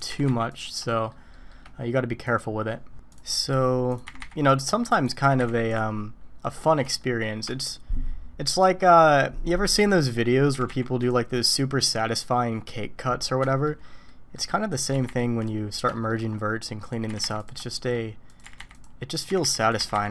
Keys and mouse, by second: 0.1 g, 0.9 shift+middle click, 1.3 shift+middle click, 2.2 click, 3.9 click, 4.0 g, 4.9 click, 5.2 g, 7.0 shift+middle click, 9.8 click, 10.5 g, 13.5 shift+click, 14.0 click, 14.9 g, 15.9 shift+middle drag, 17.1 g, 17.7 shift+middle click, 18.3 click, 18.4 g, 19.3 g, 19.8 g.